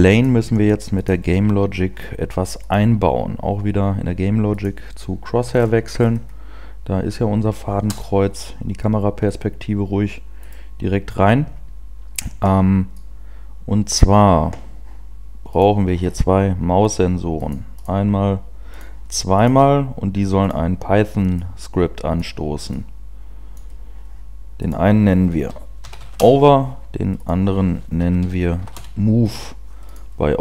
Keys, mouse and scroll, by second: 1.0 click, 5.4-7.8 scroll up 8, 7.8 scroll up 1, 7.8 KP_0, 11.8 right click.